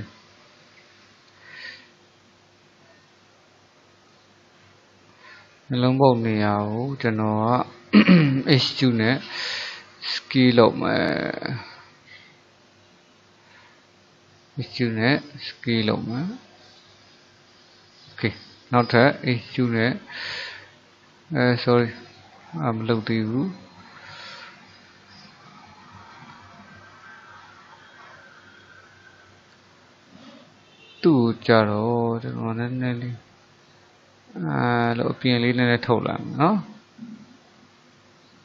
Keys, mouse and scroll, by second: 1.6-8.3 middle drag, 8.3 e, 19.0 e, 22.4 ctrl+z, 23.7-28.0 middle drag, 31.4-32.6 middle drag, 32.6 click, 35.3-38.4 middle drag.